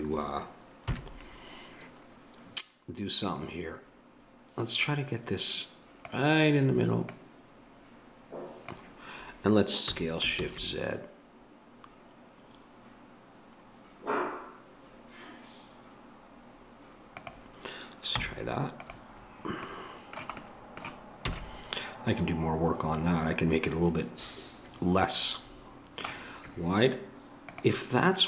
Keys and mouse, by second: 0.9 KP_7, 3.2-6.0 drag, 7.0-17.2 drag, 18.2 z, 21.3 a.